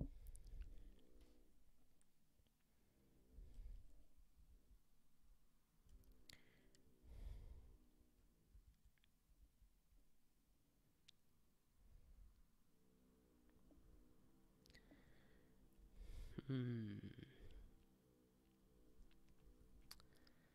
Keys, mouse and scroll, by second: 9.3 ctrl+p, 13.7 ctrl+n, 13.9 ctrl+n, 15.5 alt+Up, 16.3 ctrl+s, 16.8 ctrl+n, 19.2 alt+Up, 19.8 ctrl+s.